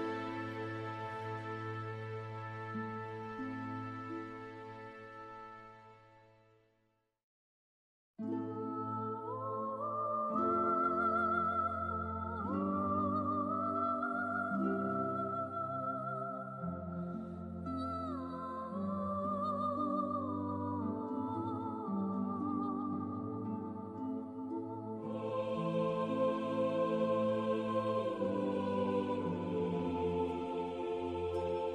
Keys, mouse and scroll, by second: 1.2 middle click, 7.6 click, 8.6-9.2 scroll down 1, 9.2-11.4 scroll up 1, 12.5 click, 17.9 click, 20.3 click, 21.7-23.2 scroll up 1, 23.2 click, 28.6-28.9 scroll down 1, 30.4 click.